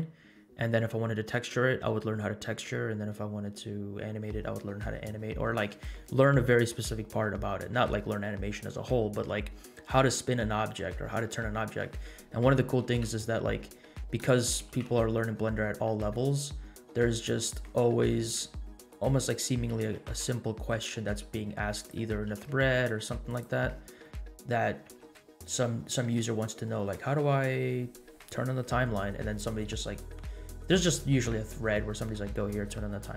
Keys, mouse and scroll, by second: 13.0 e, 14.5 g, 18.1 3, 18.9 alt+click, 19.8 s, 22.2 g, 24.0 middle click, 25.1 Tab.